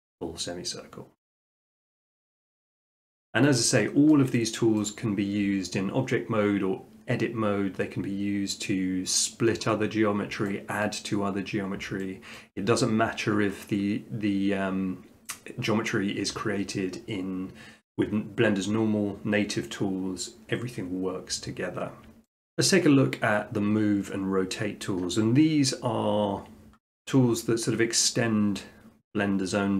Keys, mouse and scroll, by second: 1.7 Tab, 2.7-3.1 shift+middle drag, 4.1 shift+middle click, 4.8 middle click, 10.8 middle click, 11.9 middle click, 12.4 shift+middle click, 15.3 middle click, 15.7 middle click, 22.1 middle click.